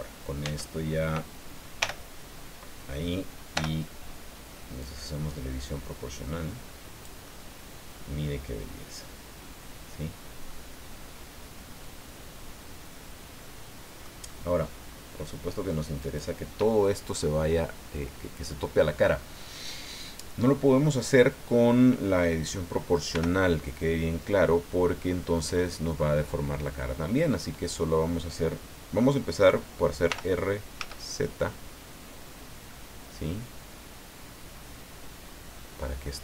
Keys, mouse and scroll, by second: 0.4 Tab, 1.8 l, 3.5 o, 4.8-7.2 drag, 7.3-14.2 middle drag, 14.2 click, 14.3 click, 16.0 right click, 23.1 l, 30.1 r, 30.8 z.